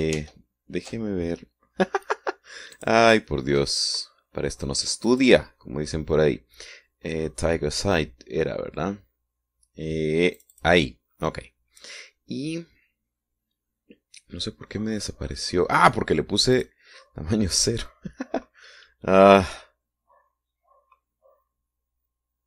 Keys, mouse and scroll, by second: 1.3 ctrl+shift+z, 3.9 click, 6.2 click, 11.5 click, 16.3-16.7 scroll up 1, 17.7 click.